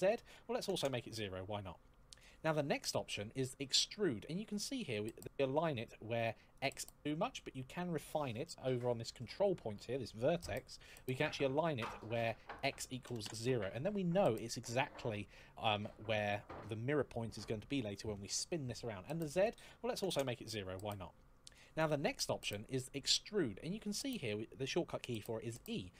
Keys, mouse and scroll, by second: 0.3 KP_0, 0.5 Return, 6.2 click, 12.2 click, 12.8 KP_0, 12.9 Return, 19.1 click, 19.7 KP_0, 19.8 Return.